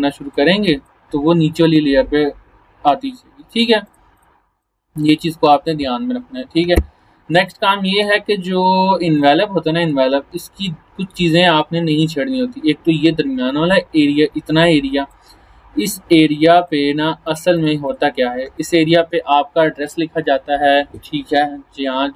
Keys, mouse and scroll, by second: 2.5-3.8 scroll down 1, 3.8-5.3 drag, 6.5 Delete, 7.3 space, 7.5 click, 7.8-8.1 space, 8.5 right click, 9.2 click, 9.8 right click, 10.4-15.2 drag, 18.5 space, 18.6 click, 18.9 space.